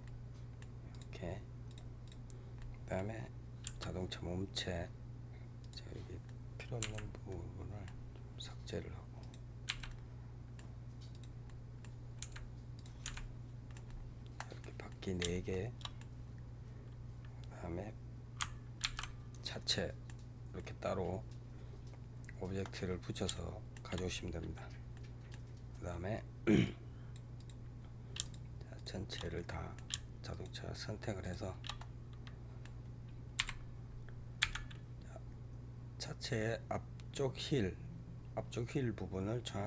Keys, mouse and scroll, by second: 0.8 click, 1.6 click, 1.9 click, 2.5-3.5 middle drag, 3.5 h, 5.5 click, 6.1-6.8 middle drag, 6.8 Delete, 7.2-8.1 middle drag, 8.1-9.1 scroll up 2, 9.1 click, 9.7 Delete, 9.7-11.0 middle drag, 11.0 click, 11.3-12.2 middle drag, 12.2 Delete, 12.7 click, 13.1 Delete, 13.4 scroll down 2, 13.6-18.2 middle drag, 18.7 alt+h, 19.4-22.8 middle drag, 22.8-23.2 scroll down 1, 23.2 shift+middle click, 24.0 scroll down 1, 24.8-25.6 middle drag, 25.6 scroll down 1, 26.5 click, 27.3 click, 28.1 shift+click, 28.6 shift+click, 29.1-30.2 middle drag, 30.2 shift+click, 31.1 shift+click, 31.7-33.2 middle drag, 33.2 KP_3, 34.3 g.